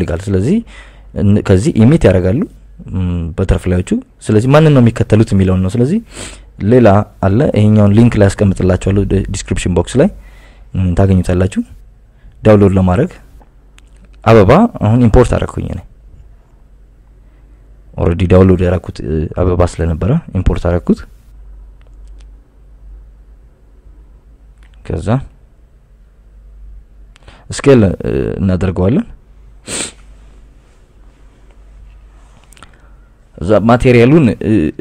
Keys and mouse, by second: 2.9-8.8 drag, 30.8 s.